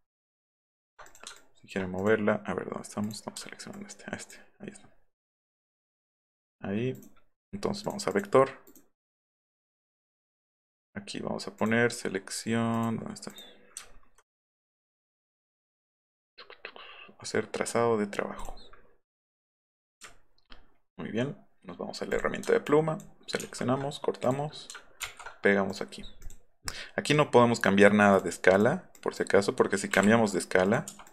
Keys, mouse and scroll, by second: 0.4 ctrl+click, 1.1 click, 1.4 ctrl+click, 2.0 click, 3.0 click, 3.7-4.3 ctrl+drag, 5.3 ctrl+click, 5.5-6.0 ctrl+right drag, 6.9 right click, 7.8 click, 8.1 click, 8.7 right click, 9.8 click, 11.6 click, 12.7 click, 13.3 click, 13.9 alt+scroll down 2, 14.4 right click, 18.4 click, 19.4 click, 20.1-20.5 alt+scroll up 4, 20.9 alt+scroll down 1, 22.1 click, 22.7 ctrl+click, 23.4 ctrl+x, 24.2 click, 25.0 ctrl+v, 25.7 click, 26.2 click, 27.7-28.2 drag, 28.5 drag, 29.0 drag, 29.9 u, 30.7 click.